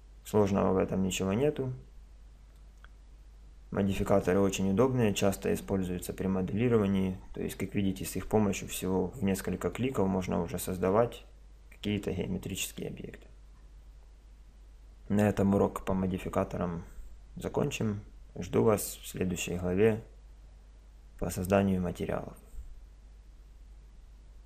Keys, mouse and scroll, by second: 1.4-3.3 middle drag, 4.3-6.4 middle drag, 9.8-11.7 middle drag.